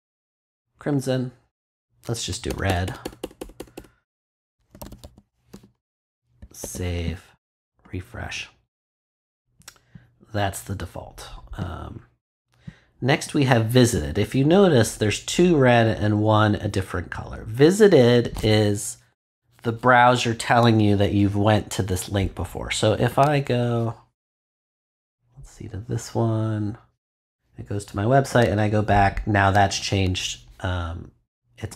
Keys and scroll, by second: 2.4 BackSpace, 4.7 r, 6.4 super+;, 6.6 super+s.